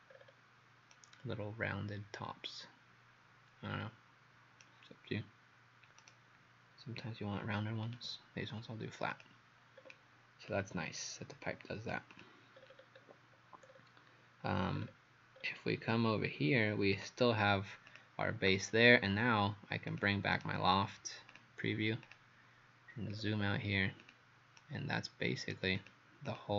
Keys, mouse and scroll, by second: 0.9 right click, 7.9 click, 9.8 scroll down 2, 10.5 click, 12.1 click, 12.6-13.0 scroll down 5, 13.7-14.5 scroll up 2, 14.5 scroll up 1, 14.8 scroll down 2, 15.4 scroll down 1, 17.0 click, 20.4 right click, 21.3 click, 23.1-24.0 scroll down 5, 24.0 click, 24.0-24.6 scroll down 1, 24.6 right click, 26.3 click.